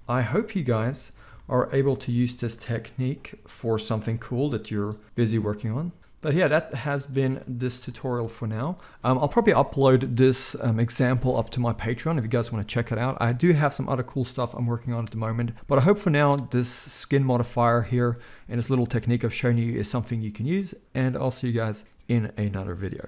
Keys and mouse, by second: 2.0-6.0 drag, 4.0 n, 6.0-8.0 middle drag, 7.2 Tab, 17.4 alt+a, 20.0 middle click.